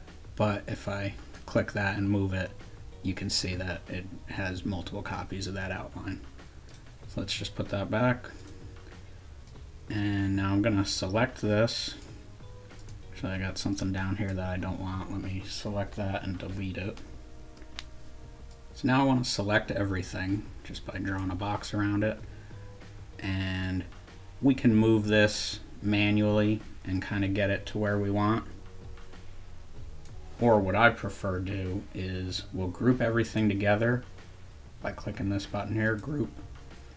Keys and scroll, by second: 17.5 Delete.